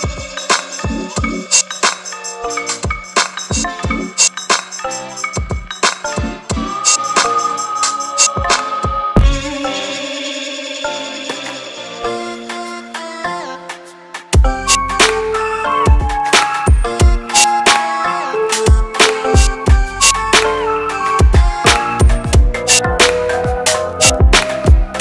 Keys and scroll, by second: 10.9 ctrl+z, 14.2 Up.